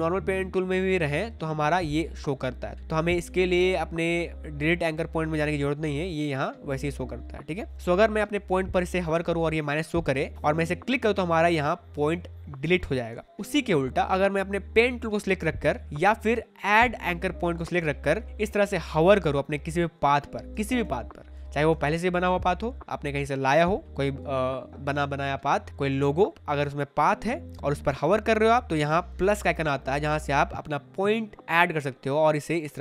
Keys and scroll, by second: 13.0 space, 20.5 space.